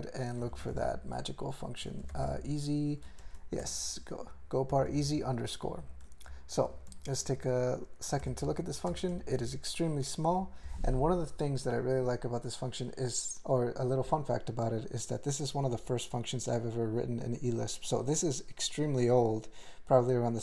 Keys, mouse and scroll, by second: 0.4-2.8 typing, 3.2 ctrl+n, 3.6 ctrl+s, 4.7 alt+f, 4.9 alt+f, 5.1 alt+b, 5.6 alt+b, 6.3 ctrl+n, 6.6 ctrl+p, 7.2 ctrl+=, 8.2 alt+m, 8.4 ctrl+l, 8.9 ctrl+space, 9.1 ctrl+alt+f, 10.3 ctrl+g.